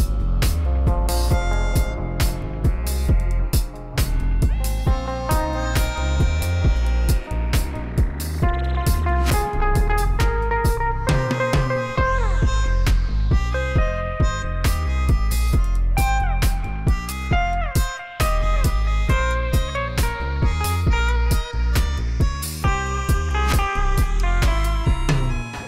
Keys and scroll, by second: 0.6 Tab, 2.1 1, 2.2 0, 2.9 Tab, 3.1 g, 3.2 z, 3.8 Tab, 4.3 s, 4.4 shift+z, 5.6 ., 7.8 g, 8.2 z, 9.5 g, 10.6 shift+z, 11.1 shift+z, 11.5 g, 11.7 shift+z, 13.2 alt+a, 13.9 c, 14.6 g, 15.3 r, 16.0 g, 17.3 alt+a, 17.5 c, 18.2 g, 19.0 r, 19.6 g, 21.2 a, 22.3 shift+r, 23.6 Tab, 24.3 g, 24.4 z.